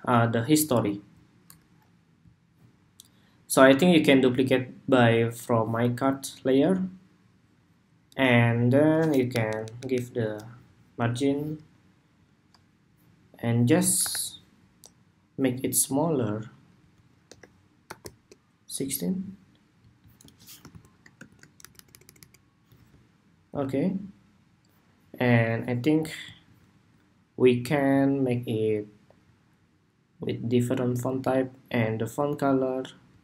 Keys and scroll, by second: 4.0 super+d, 9.0 alt+Down, 9.5 alt+Down, 9.8 alt+Down, 13.7 super+-, 14.6 super+-, 20.4 alt+shift+Left, 21.3 alt+Left, 22.0 alt+Right.